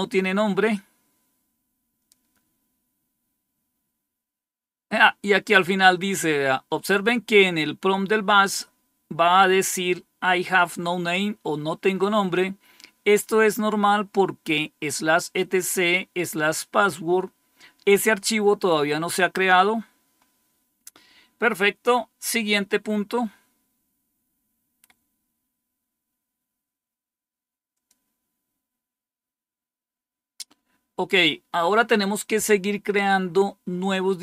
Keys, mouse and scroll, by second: 0.4-1.7 scroll down 1, 1.7-3.2 scroll down 1, 3.2-19.2 scroll down 1, 19.2-27.5 scroll down 1, 27.6 click.